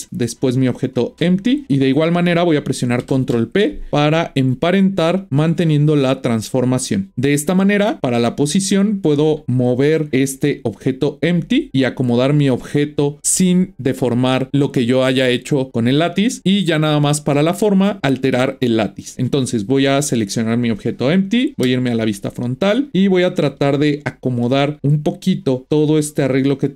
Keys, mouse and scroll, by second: 0.6 shift+click, 3.1 ctrl+p, 7.6 click, 8.6 click, 10.1 g, 20.2 drag, 21.6 KP_1, 22.8 shift+middle drag, 23.0-24.3 scroll up 1, 24.3 g.